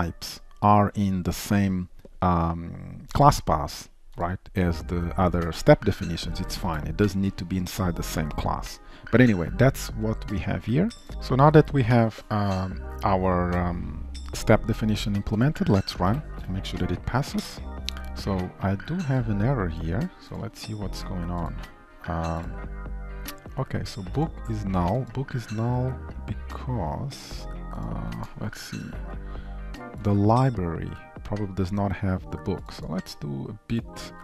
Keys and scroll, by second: 6.8 ctrl+shift+F12, 16.1 alt+shift+F10, 28.6 ctrl+b.